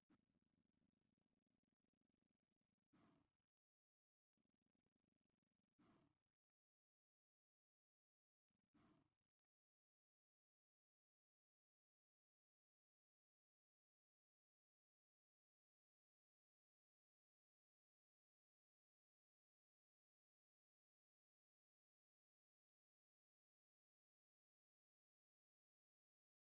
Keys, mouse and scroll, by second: 0.5-3.7 drag, 4.8 middle click, 5.0 middle click, 5.8 middle click, 7.7-9.2 drag, 9.6 click, 13.0-15.7 drag, 16.1 shift+click, 16.9-19.0 drag, 21.1-23.4 middle drag, 21.2-22.7 drag.